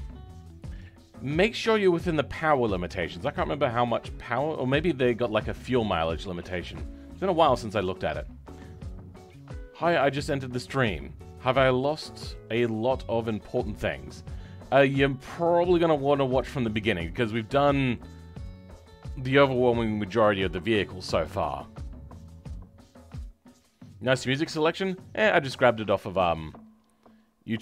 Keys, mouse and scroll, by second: 17.1-17.5 scroll down 2, 17.5 middle click, 18.4-21.5 middle drag.